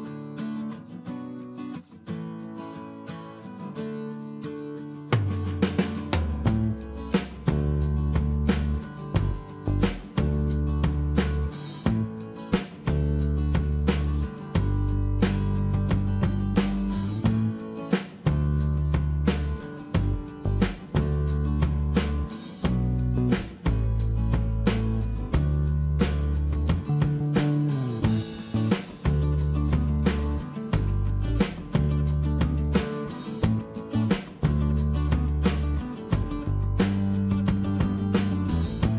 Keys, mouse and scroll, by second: 0.8 e, 11.5 space, 16.5 space, 17.9 Delete, 23.4 shift+space, 28.5 shift+space, 30.7 shift+e, 36.9 space, 38.8 shift+l.